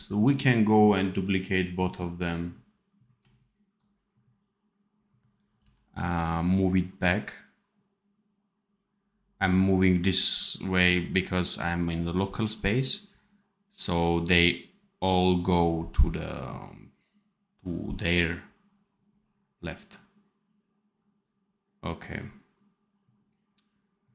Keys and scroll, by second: 5.5 v.